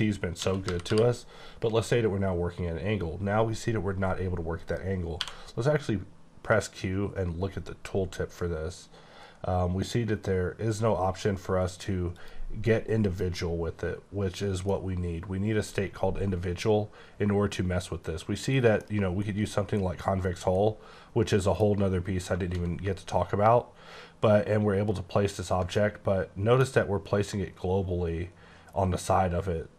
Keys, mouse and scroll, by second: 0.4-0.9 typing, 4.5 right click, 5.2 typing, 12.2 click, 14.7 middle click, 16.5 scroll down 2, 17.2-18.2 scroll up 2, 18.2 scroll down 2, 18.8 middle click, 23.2-24.6 ctrl+scroll down 5, 24.6-25.7 ctrl+scroll up 7, 25.7 middle click, 26.8 ctrl+scroll up 2, 27.6-28.1 ctrl+scroll up 4, 29.1 ctrl+scroll up 2.